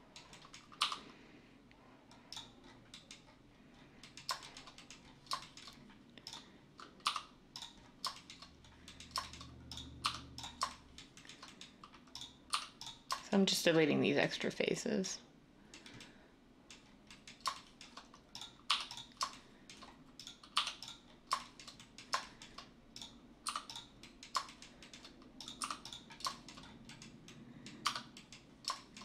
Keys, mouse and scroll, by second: 0.8 x, 7.0 x, 10.0 x, 12.5 x, 18.6 x, 20.6 x, 23.4 x, 25.8 x, 27.8 Tab.